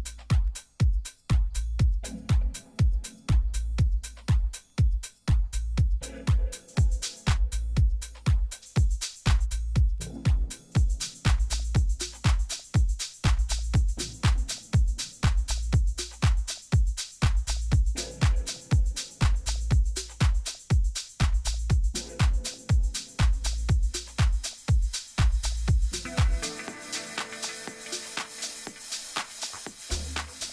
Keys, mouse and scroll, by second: 0.4-2.6 middle drag, 6.8-8.0 middle drag, 8.0-9.3 right drag, 8.5 Tab, 9.3 click, 9.6 a, 9.8 right click, 9.9-12.8 middle drag, 13.0-15.7 right drag, 15.0-16.9 drag, 17.8-19.4 middle drag, 18.3 a, 19.9-21.6 middle drag, 21.6 Tab, 22.0-23.2 right drag, 23.0 click, 23.9 click, 25.1-26.8 middle drag, 27.0 KP_1, 27.6 Tab, 28.6 a, 29.2 a, 29.6 z, 30.3-30.5 middle drag.